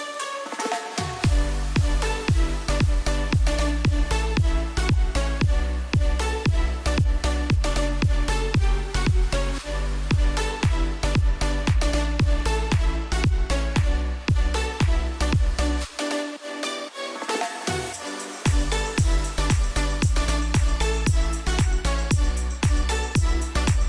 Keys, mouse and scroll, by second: 2.4-3.5 typing, 5.0-15.6 drag, 15.6 Up, 17.0 click.